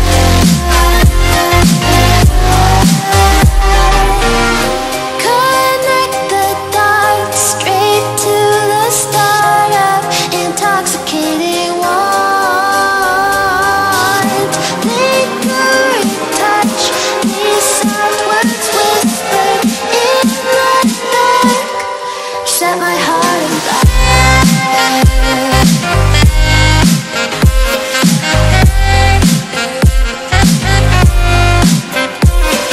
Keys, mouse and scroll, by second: 2.8-9.4 drag, 20.0 space, 20.3 click, 20.8 right click, 21.8-25.0 drag, 30.3 Down, 31.7 Up, 32.0 click.